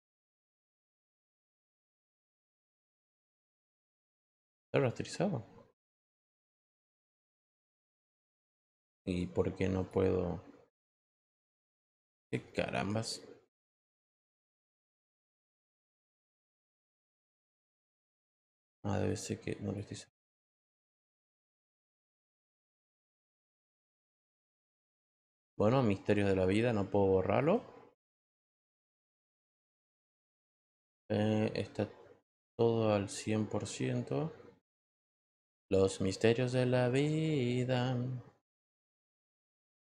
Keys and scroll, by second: 0.5 Tab, 1.0 Tab, 28.3 e.